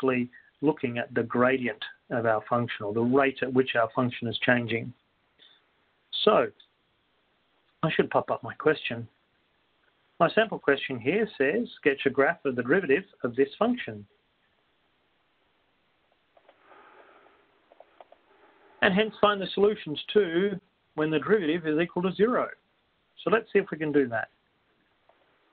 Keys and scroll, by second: 0.6-1.3 typing, 2.7 x.